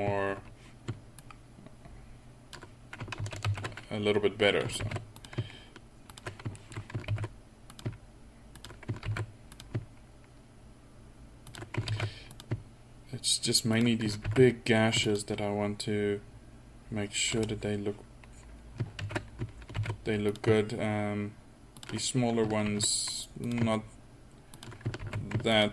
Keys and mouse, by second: 1.2-3.2 drag, 3.3 ctrl+z, 3.5 ctrl+z, 4.9 ctrl+r, 6.6 click, 7.1 ctrl+r, 9.1 ctrl+r, 12.0 ctrl+r, 14.3 ctrl+r, 19.1 ctrl+z, 19.8 ctrl+r, 22.7 ctrl+r, 25.0 ctrl+r.